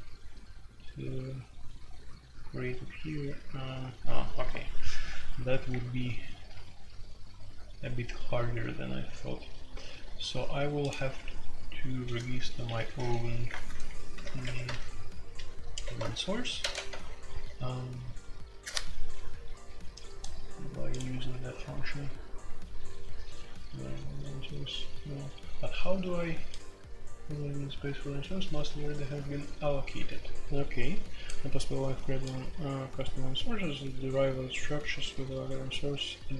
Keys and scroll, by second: 11.1 Escape, 12.9 a, 13.5 Return, 14.1 shift+9, 14.2 shift+0, 14.4 Escape, 14.7 super+k, 15.4 super+k, 15.4-17.1 typing, 15.8 super+j.